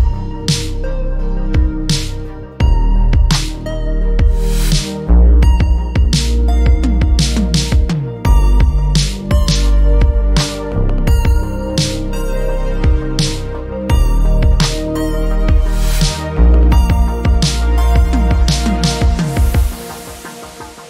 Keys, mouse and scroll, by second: 0.8 ctrl+z, 1.4 alt+click, 4.3 ctrl+z, 6.3 click, 8.4 ctrl+a, 8.8 right click, 10.0 click, 13.0 right click, 13.6 click, 17.5 scroll down 1, 18.4 alt+middle click, 18.9 scroll down 1, 19.4 alt+click.